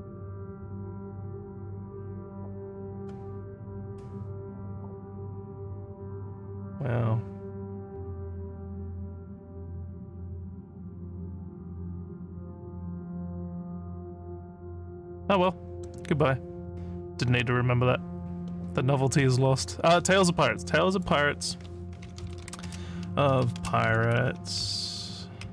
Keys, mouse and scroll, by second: 8.0 scroll up 1, 10.8 scroll down 1, 11.6 scroll down 1, 12.5-13.2 scroll down 1, 13.3 scroll down 1, 15.8 middle click, 17.3 middle click, 18.5 middle click, 20.8 click, 21.8-24.3 typing, 25.3-25.5 typing.